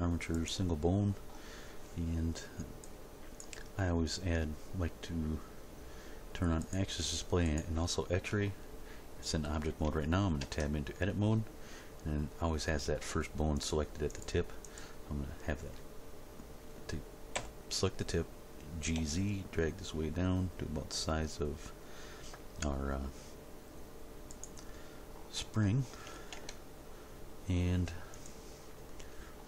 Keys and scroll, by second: 10.4 Tab, 17.3 g, 19.0 z, 26.4 Tab.